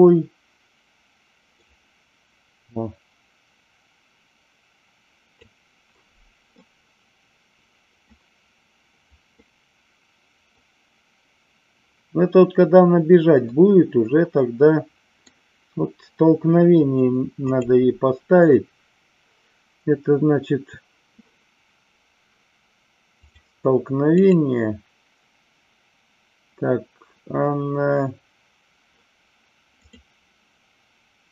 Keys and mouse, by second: 1.5-5.3 drag, 6.5-8.1 middle drag, 9.2-10.5 middle drag, 13.5-15.2 middle drag, 17.3 click, 23.2 click, 24.2 click, 29.9-31.3 drag.